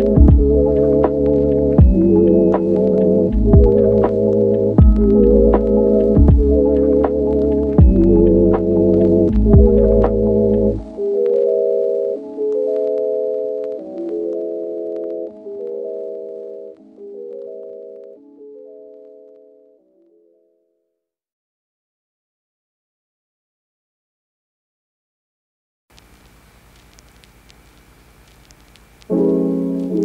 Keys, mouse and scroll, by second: 0.8 click, 3.7 click, 10.6 click, 11.0 click, 12.5 click, 14.3 middle click, 14.9 click, 16.3 click, 19.5 click, 19.9 middle click, 22.2 click, 23.2 click, 25.6 click, 26.3 middle click, 28.9 click.